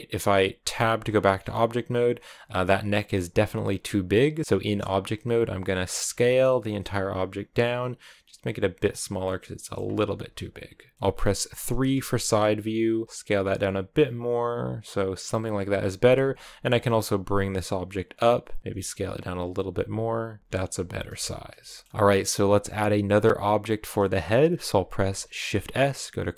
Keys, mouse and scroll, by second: 0.6 Tab, 0.8-1.1 scroll down 4, 1.1 a, 1.2-3.6 middle drag, 3.6 right click, 4.4-5.7 middle drag, 5.7 s, 9.0 middle click, 9.7 s, 10.9 middle click, 11.5 KP_3, 12.9 s, 16.4 g, 18.6-21.0 typing, 21.2 scroll down 1, 21.5-26.3 shift+middle drag.